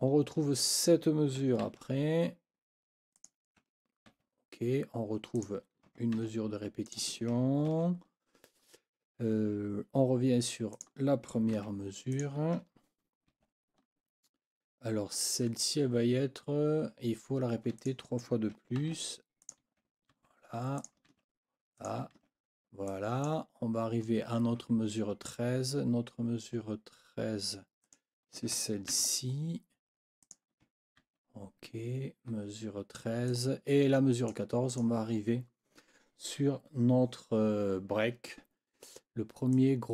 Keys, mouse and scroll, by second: 0.6 click, 1.6 ctrl+c, 3.2 click, 4.1 ctrl+v, 5.4 click, 6.2 ctrl+c, 6.8 click, 7.7 ctrl+v, 10.7 click, 11.5 ctrl+c, 12.1 ctrl+click, 13.3 ctrl+v, 17.8 click, 18.8 ctrl+c, 19.4 ctrl+click, 20.1 ctrl+v, 20.8 ctrl+click, 21.1 ctrl+v, 21.8 scroll up 2, 22.1 ctrl+v, 22.9-23.4 scroll up 2, 27.8 scroll up 2, 28.9 ctrl+c, 30.2 click, 31.0 ctrl+v, 33.3-34.5 drag, 34.7 click, 39.5 click.